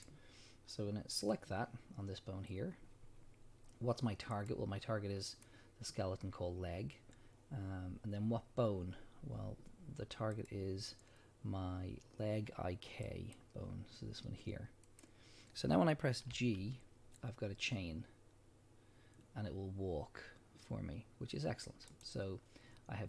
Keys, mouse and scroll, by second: 16.3 g, 22.0 right click.